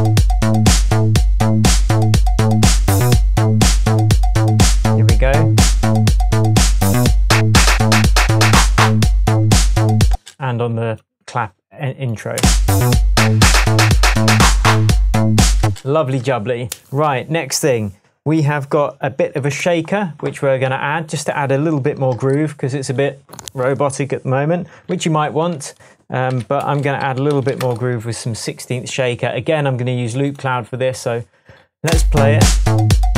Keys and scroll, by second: 10.1 space, 12.4 space, 15.7 space, 16.0 s, 25.0 super+t, 26.4-28.0 typing, 31.9 space.